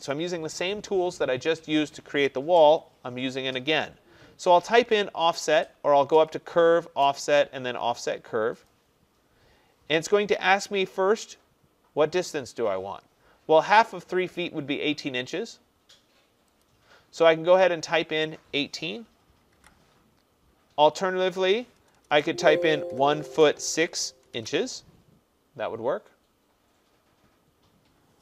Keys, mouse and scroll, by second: 0.1 click, 6.3 click, 8.7 click, 16.7 click, 19.5 typing, 21.9-24.9 typing.